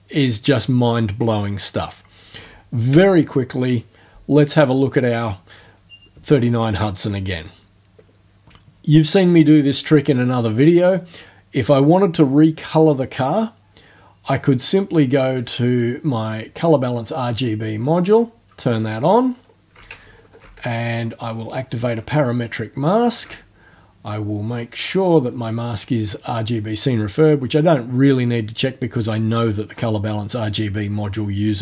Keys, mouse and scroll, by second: 2.9 BackSpace, 12.3 click, 15.4 click, 16.6 click, 17.9 click, 18.8-19.6 ctrl+alt+scroll up 2, 19.6-20.1 ctrl+alt+scroll up 1, 20.1 ctrl+alt+scroll down 1, 21.4 click, 22.1-22.6 ctrl+alt+scroll down 1, 22.8 ctrl+alt+scroll down 1, 25.3 click.